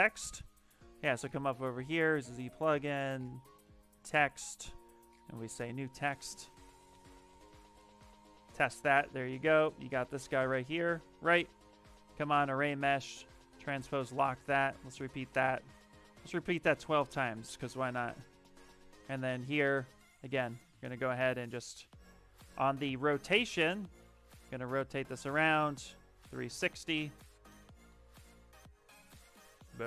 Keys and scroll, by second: 6.5-7.7 typing, 8.9 w, 10.4 q, 22.2 ctrl+z, 27.8 w.